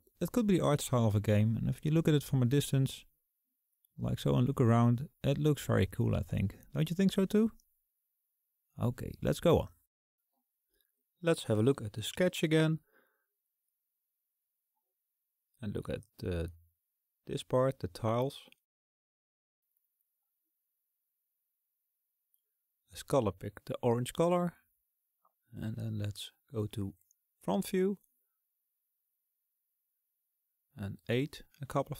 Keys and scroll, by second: 26.2 KP_1, 29.1 KP_8, 29.7 KP_8, 31.0 KP_8.